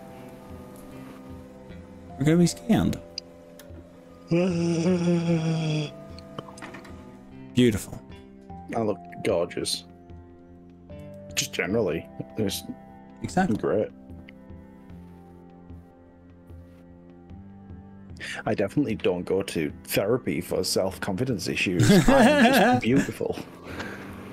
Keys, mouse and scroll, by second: 0.2 click, 0.8 ctrl+z, 1.1 scroll up 1, 1.5 scroll down 1, 1.7 s, 11.0 s, 12.1-12.9 scroll up 6, 13.7 scroll up 1, 19.9 click, 20.5 click, 22.5 click, 23.5 g.